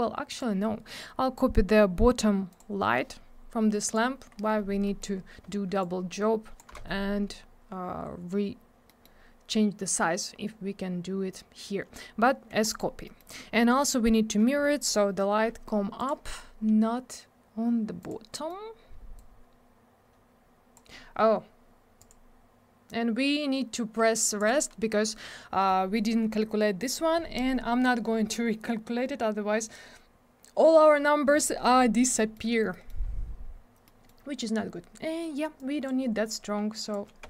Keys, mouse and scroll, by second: 0.3 click, 0.4 click, 1.0 scroll up 1, 2.5 click, 2.6 click, 3.8 click, 3.9 click, 4.3 scroll down 1, 5.0 middle click, 5.0 middle click, 5.1-5.4 scroll up 1, 5.8 shift+click, 8.9 middle click, 9.0 middle click, 12.6 click, 12.7 click, 13.0 middle click, 13.2 middle click, 13.3 scroll up 1, 13.6 middle click, 13.8 middle click, 16.0 click, 18.0 click, 18.3 middle click, 19.2 click, 22.0 click, 22.1 click, 24.4 click, 24.5 click, 32.2 middle click, 32.3 middle click, 32.5 scroll down 1, 32.9 middle click, 33.0-33.5 scroll up 1, 33.8 middle click, 35.6 click, 36.7 click, 36.9 click, 37.2 1.